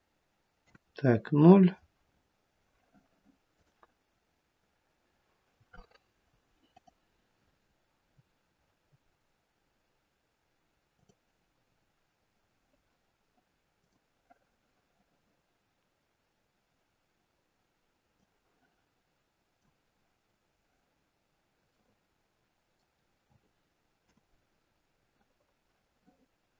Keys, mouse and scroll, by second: 0.7 KP_0, 2.1-3.6 scroll up 1, 3.6 click, 3.6-5.1 scroll up 4, 6.7 click, 10.9 click, 11.8-12.3 scroll down 5.